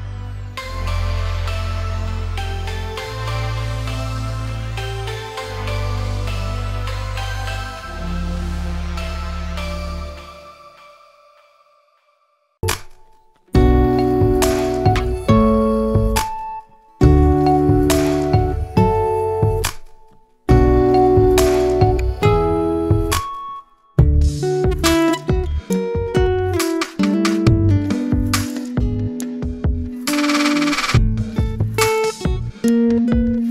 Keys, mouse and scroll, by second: 1.6-2.0 scroll down 1, 2.0-3.5 drag, 4.8-6.3 middle drag, 6.3 s, 9.1-10.7 middle drag, 11.0 Tab, 11.3 Tab, 11.5 click, 11.8 scroll down 2, 12.0-13.6 middle drag, 13.9 click, 14.8 click, 15.4-16.4 scroll down 1, 16.4 click, 16.9-18.5 drag, 18.6 middle click, 19.4 s, 21.1 middle click, 22.0 click, 22.4 middle click, 23.2-24.7 drag, 24.7 s, 25.8-26.8 middle drag, 26.8-28.1 drag, 28.1-29.4 middle drag, 29.4-30.1 scroll down 1, 30.1 s, 31.4 click, 31.8 s, 32.8 middle click, 33.3 click.